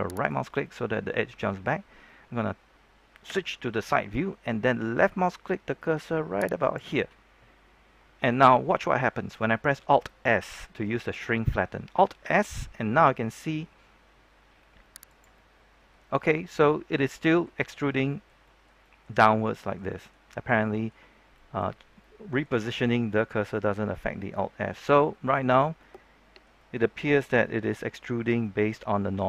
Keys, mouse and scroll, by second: 0.1 right click, 0.6-2.2 middle drag, 3.2 KP_3, 6.6 click, 8.1 middle click, 8.8-10.0 scroll up 2, 10.0 middle click, 12.2 alt+s, 15.0 click, 15.3-16.6 middle drag, 17.4 scroll down 1, 17.6-21.9 middle drag, 22.5 scroll up 1, 22.7-29.0 middle drag, 29.1-29.2 shift+middle drag.